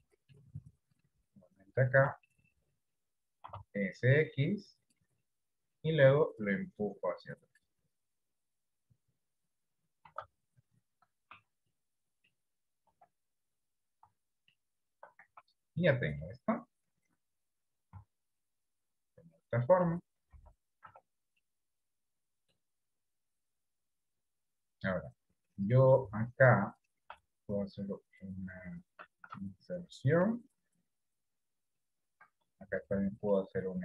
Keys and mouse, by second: 0.3 middle click, 2.6 middle click, 3.7 s, 5.5 middle click, 6.6-7.7 drag, 8.9 click, 10.4 s, 11.5 Tab, 12.1 middle click, 13.1 KP_1, 14.9 shift+middle click, 15.5 Tab, 16.7-18.1 middle drag, 18.3 Tab, 18.7-20.1 middle drag, 20.5 KP_1, 21.2 Tab, 21.7-22.9 middle drag, 24.8 click.